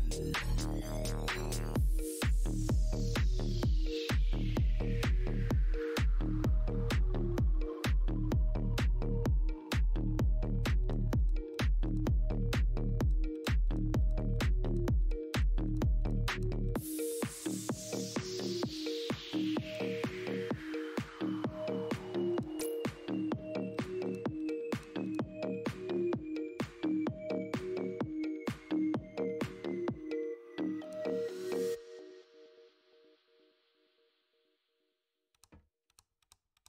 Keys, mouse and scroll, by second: 3.5 click, 4.6 Tab, 5.4 click, 5.9 click, 6.9 Tab, 6.9 right click, 7.0 Tab, 7.9 click, 8.0 Tab, 8.5 click, 10.2 click, 10.3 Tab, 10.8 Tab, 11.2 w, 12.3 Tab, 13.0 w, 14.7 Tab, 15.6 w, 16.2 w, 17.9 w, 19.1 w, 19.7 Tab, 20.2 w, 20.8 Tab, 21.3 Tab, 22.1 Tab, 22.3 space, 23.1 w, 23.4 Tab, 24.7 w, 25.8 Tab, 26.1 KP_6, 26.3 Tab, 26.9 Tab, 29.6 Tab, 30.2 Tab, 30.3 w, 30.6 Tab, 30.8 KP_2, 31.3 Tab, 33.7 Tab, 34.9-36.6 typing, 35.3 Tab, 35.8 Tab.